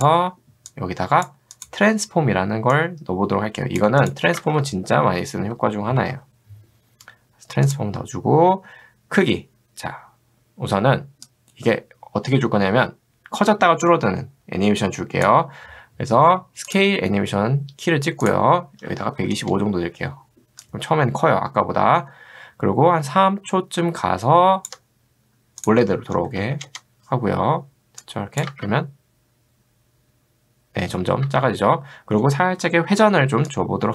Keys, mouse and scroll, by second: 0.0 click, 0.9 click, 1.6 click, 2.7-3.8 drag, 4.0 click, 4.5 ctrl+space, 4.7-6.6 typing, 7.7 click, 11.3-15.3 drag, 16.7 click, 18.6-19.8 typing, 20.6-24.7 drag, 26.2 1, 26.4 0, 28.2 click, 28.5 space, 31.3 space, 33.5 click.